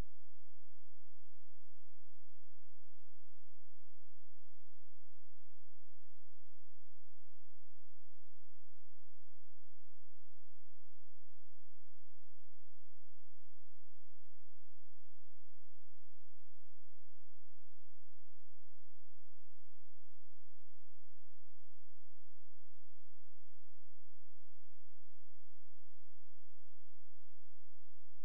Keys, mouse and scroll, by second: 1.5-7.1 typing, 8.2-9.8 typing, 13.4-14.6 typing, 16.1 ctrl+space, 18.5 click, 22.1 ctrl+space, 23.0 Delete, 26.1 click.